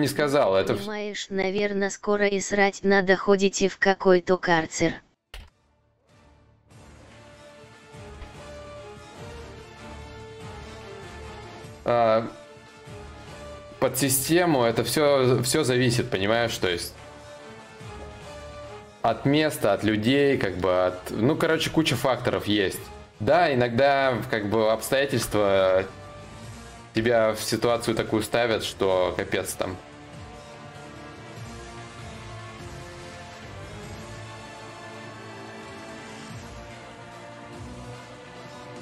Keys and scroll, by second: 4.9 ctrl+z, 6.6 ctrl+z, 7.5 ctrl+z.